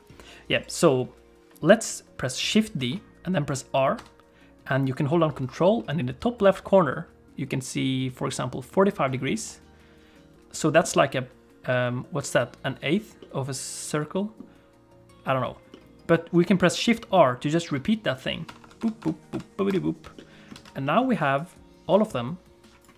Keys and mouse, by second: 2.8 shift+d, 10.3-12.3 middle drag, 14.3-18.3 middle drag, 18.5-19.7 typing, 20.1 middle click, 20.5 alt+a, 20.8 middle click, 21.4-22.9 drag.